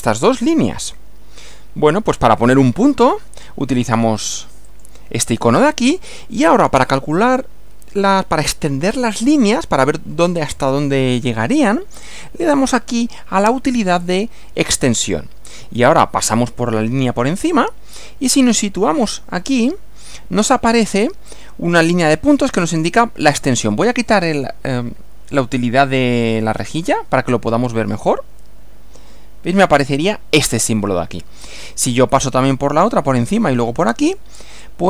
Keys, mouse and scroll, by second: 4.7 click, 13.9 click, 26.5 click.